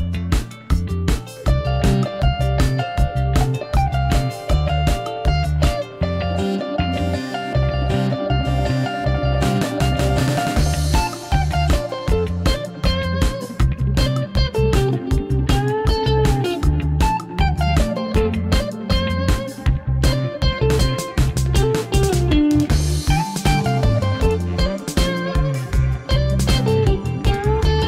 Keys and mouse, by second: 2.0 click, 2.8 ctrl+r, 6.5 click, 7.0-7.6 middle drag, 8.0 g, 8.3 x, 9.3-9.6 shift+middle drag, 10.3 3, 10.4 click, 10.9 alt+click, 11.5 x, 13.9-17.2 typing, 18.3 click, 18.5-19.2 middle drag, 19.9-21.3 middle drag, 22.4 3, 23.2 shift+click, 25.1 ctrl+l, 25.6 x, 27.2 drag, 27.4-27.8 middle drag.